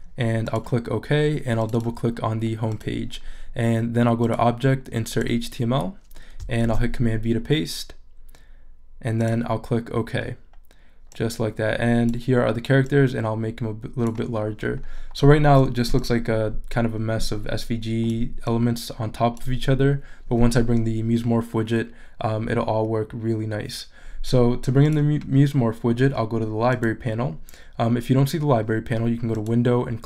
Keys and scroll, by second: 6.6 super+v.